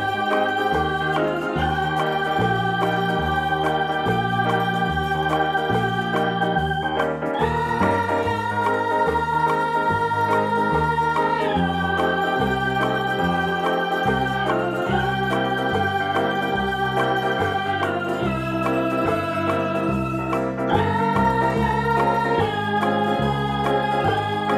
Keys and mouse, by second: 2.8 p, 3.4 click, 4.9 p, 5.1 space, 5.3 click, 7.7 click, 9.1 space, 9.2 click, 9.3 space, 9.4 -, 11.1 click, 12.3 v, 13.5 click, 14.4 right click, 16.0 click, 18.2 click, 20.6 click, 21.3 alt+BackSpace, 22.2 v, 24.3 p.